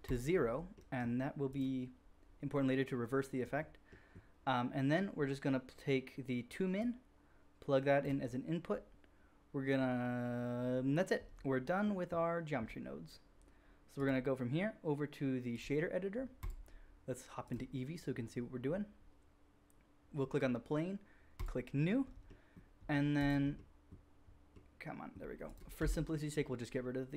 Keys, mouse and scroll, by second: 5.7-6.7 middle drag, 6.7-16.4 drag, 16.4-17.4 middle drag, 17.4-20.1 drag, 20.1-21.3 middle drag, 21.3-23.8 drag, 23.8-25.4 middle drag, 25.4 click, 25.5-27.1 middle drag, 25.8 x.